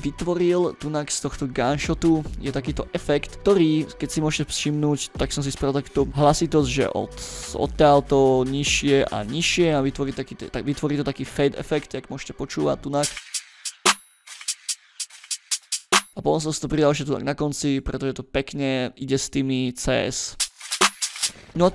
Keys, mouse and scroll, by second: 0.3-0.7 drag, 0.9-1.9 scroll up 2, 1.9 click, 2.6 click, 3.2 scroll down 1, 6.1 click, 7.1 click, 8.4 click, 9.3 click, 9.9 scroll down 1, 11.5 scroll up 1, 12.9 space, 16.9 click, 18.1 ctrl+middle click, 18.1-18.4 ctrl+scroll up 2, 20.3 space, 21.2 space.